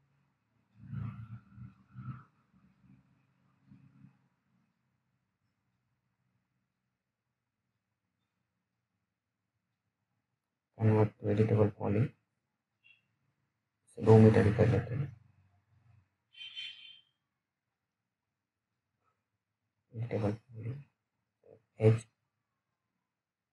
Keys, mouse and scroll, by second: 1.1 alt+middle click, 1.6 alt+scroll up 1, 2.0 click, 2.5 alt+middle click, 2.9-3.2 alt+scroll up 1, 3.2 middle click, 3.3 middle click, 3.5 scroll up 1, 3.6 middle click, 3.7 alt+middle click, 4.2 scroll down 1, 4.5 alt+middle click, 9.1 right click, 10.8 click, 17.3 right click, 19.2 click.